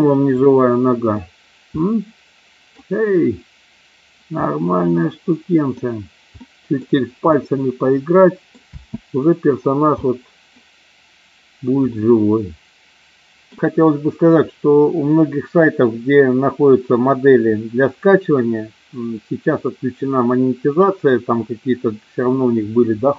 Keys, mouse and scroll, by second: 0.5-1.1 middle drag, 1.7 middle click, 4.3-5.7 middle drag, 6.3-6.7 middle drag, 7.2-8.3 middle drag, 8.7 space, 10.0-10.6 middle drag, 11.8-13.4 middle drag.